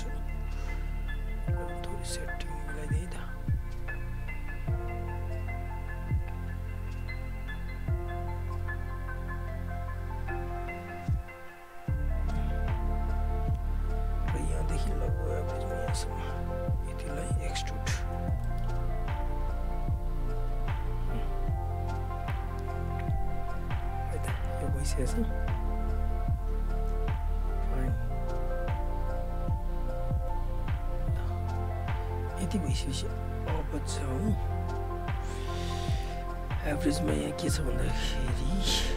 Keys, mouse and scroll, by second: 13.6 alt+right click, 13.8 alt+click, 15.3 shift+click, 17.3 shift+right click, 18.4 alt+middle click, 18.8 alt+click, 20.7 r, 21.2 click, 22.0 alt+right click, 22.2 alt+click, 23.1 alt+right click, 23.4 alt+click, 24.7 w, 25.5-29.1 drag, 32.3 right click, 33.3 alt+click, 35.2 alt+right click, 35.6 alt+click, 35.9 alt+middle click, 36.1 alt+right click, 36.4 alt+click, 37.2 right click, 38.3 alt+click.